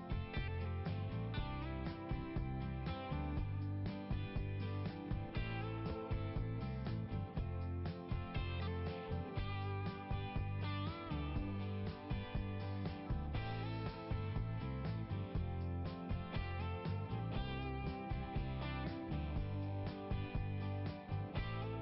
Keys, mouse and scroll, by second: 0.1 click, 3.9 click, 5.2 click, 5.9-6.8 scroll down 1, 12.6-14.7 scroll down 2, 14.7 click, 19.1 middle click.